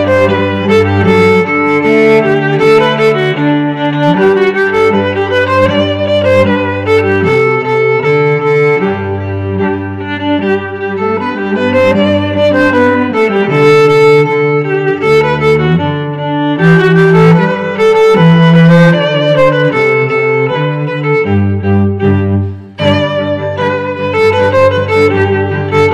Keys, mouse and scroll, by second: 3.8 s, 8.4 g.